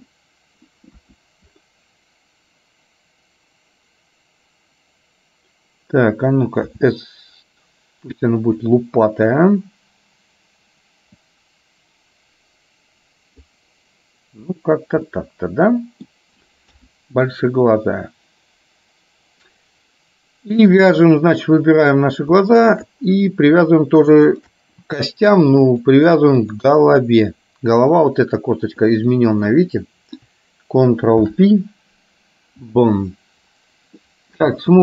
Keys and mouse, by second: 1.1 KP_1, 6.8 s, 11.6-13.6 drag, 15.2 middle click, 16.8 KP_1, 21.2 click, 24.3 shift+click, 25.9 click, 28.2 click, 28.8 middle click, 31.2 ctrl+p, 34.1 middle click, 34.7 space.